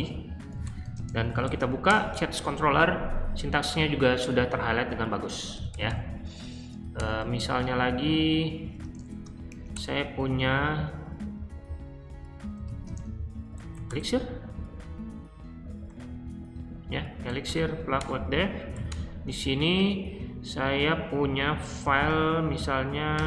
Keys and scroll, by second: 0.2-1.8 typing, 5.3-7.0 typing, 8.3-9.6 typing, 12.1-14.0 typing, 17.2-19.1 typing, 17.9 Return, 21.5-23.2 typing.